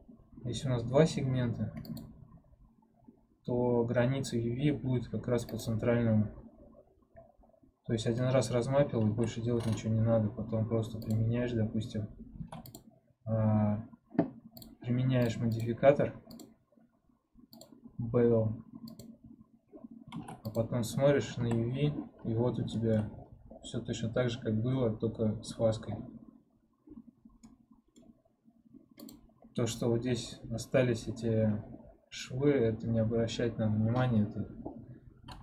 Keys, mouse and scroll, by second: 1.9-7.4 drag, 7.4-8.1 scroll down 1, 8.1 middle click, 9.0 a, 12.9 ctrl+Tab, 15.4-20.4 drag, 20.4 ctrl+Tab, 21.3 a, 27.3-29.0 middle drag, 29.0 click, 29.5-30.0 scroll up 1, 30.0-31.5 scroll down 1, 31.5-35.4 scroll down 1.